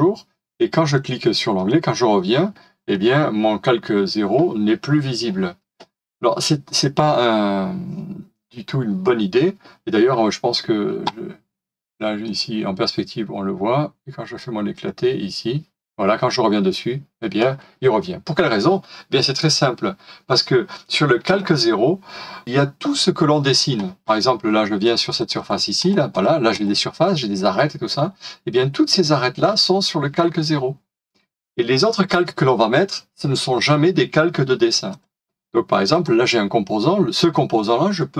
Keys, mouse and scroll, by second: 25.0 double click.